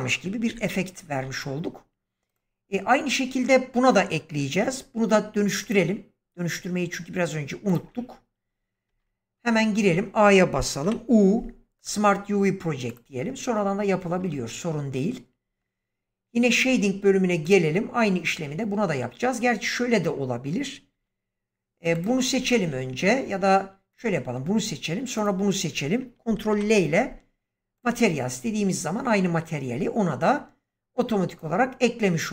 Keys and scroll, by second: 0.4 shift+Left, 8.8 Tab, 9.7 a, 10.7 u, 14.2 Tab, 20.8 Delete, 26.4 ctrl+i.